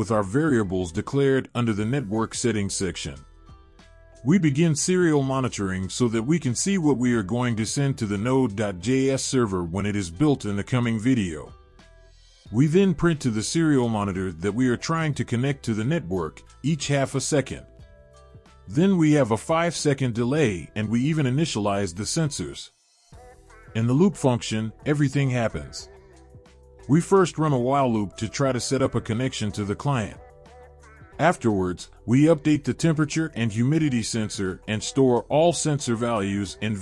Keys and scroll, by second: 26.4 ctrl+v.